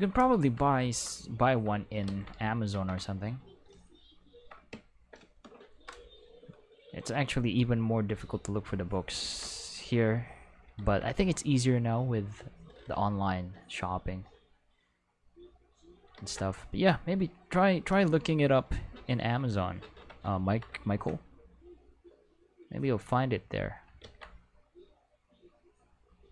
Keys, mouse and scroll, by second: 0.8 ctrl+Tab, 2.1 ctrl+z, 2.7 ctrl+Tab, 3.2 click, 5.7 Home, 8.2 click, 9.2 ctrl+z, 10.1 click, 10.8 ctrl+z, 11.4-14.2 drag, 15.2 click, 16.2 ctrl+z, 17.1 click, 22.9 click, 24.0 ctrl+z, 24.7-26.3 drag.